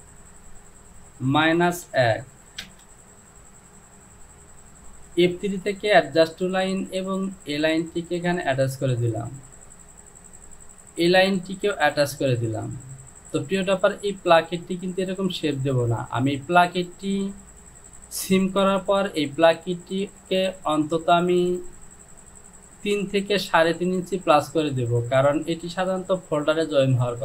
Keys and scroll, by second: 1.3 KP_Subtract, 1.9 KP_1, 2.7 Return.